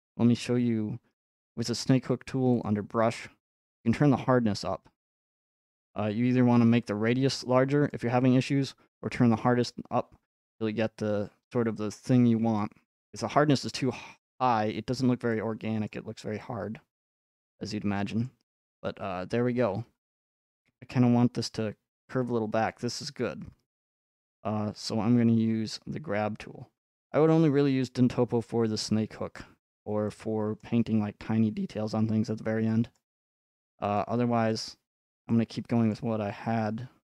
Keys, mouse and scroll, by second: 2.6-4.7 drag, 5.6-7.7 drag, 7.9-11.6 drag, 9.5-11.6 middle drag, 12.6-14.7 drag, 14.8 middle click, 15.2 middle click, 15.2 middle click, 15.9 middle click, 16.1 middle click, 16.2 middle click, 18.3 click, 19.6 click, 20.9 click, 30.6-30.9 scroll, 32.2-32.8 scroll, 34.0 click, 35.1 scroll, 35.9 scroll.